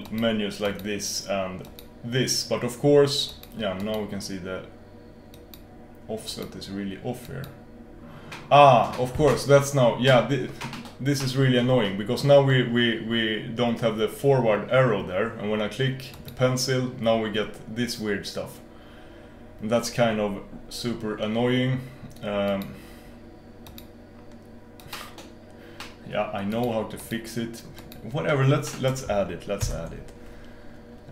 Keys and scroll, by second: 29.7 super+s.